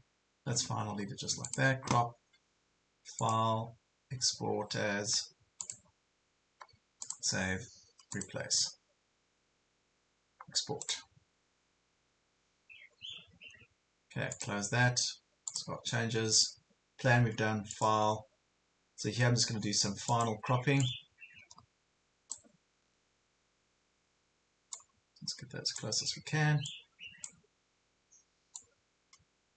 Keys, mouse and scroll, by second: 1.0 ctrl+scroll down 1, 1.4-22.5 drag, 22.7 ctrl+scroll down 1, 23.5 scroll down 1, 24.9-29.5 drag.